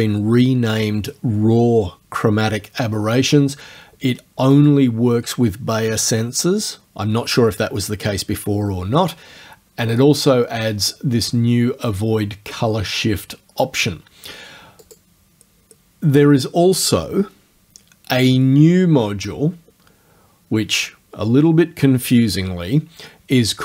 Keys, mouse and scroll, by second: 4.6 click, 14.8 click.